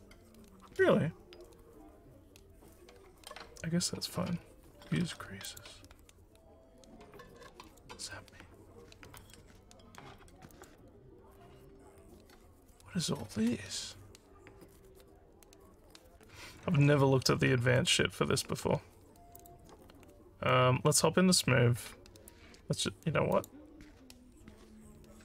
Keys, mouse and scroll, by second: 5.4 click, 7.6 click, 9.1 click, 10.5 click, 19.4 click, 23.3 click.